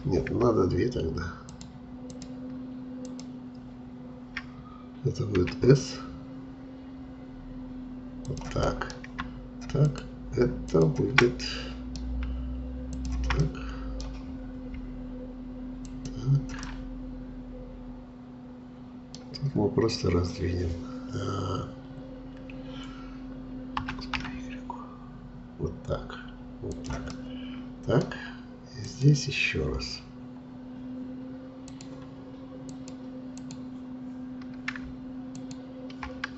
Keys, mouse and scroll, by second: 1.5-5.4 shift+drag, 5.4 s, 8.7-9.8 middle drag, 9.8-11.2 shift+drag, 11.2-12.9 middle drag, 12.9 shift+click, 13.4 middle click, 14.4-15.8 scroll down 3, 15.9 shift+click, 16.6-19.5 middle drag, 19.5-19.8 scroll up 2, 23.8 s, 27.1-28.9 middle drag, 28.9-36.3 drag.